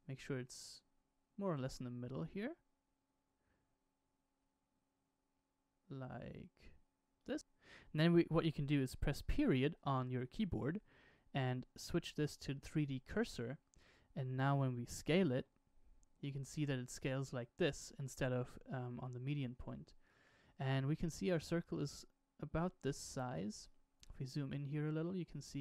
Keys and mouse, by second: 10.0 ., 15.4 s, 24.5 shift+middle drag, 24.7 shift+middle drag.